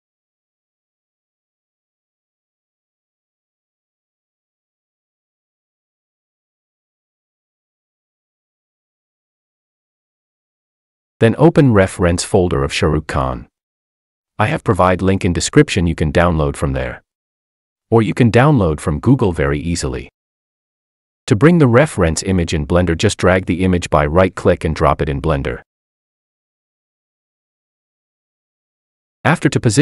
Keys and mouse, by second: 2.0-3.5 drag, 6.2 x, 9.6-12.6 drag, 13.2 click.